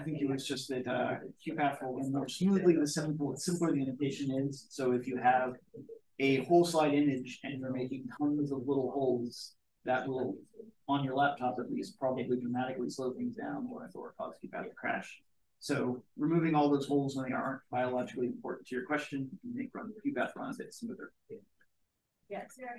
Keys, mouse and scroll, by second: 19.3-20.4 drag.